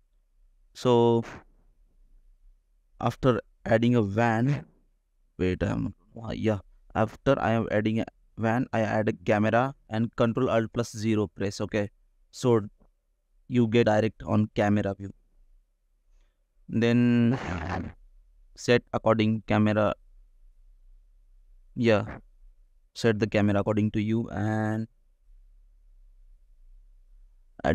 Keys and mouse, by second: 1.2 click, 1.6 click, 3.5-5.2 drag, 6.1 click, 6.6 click, 7.5 shift+a, 10.3 ctrl+alt+KP_0, 12.3 shift+click, 14.0-17.6 drag, 16.5 BackSpace, 20.4 n, 21.2 click, 21.4 n, 22.4 shift+click.